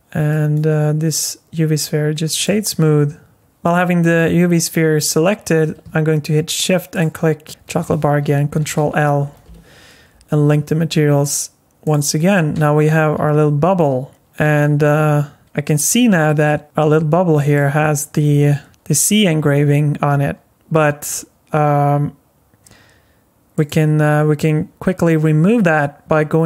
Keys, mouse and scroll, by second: 0.3 right click, 6.9 shift+click, 8.5 ctrl+l, 11.2 click, 11.8 click, 12.5 s, 18.7 r.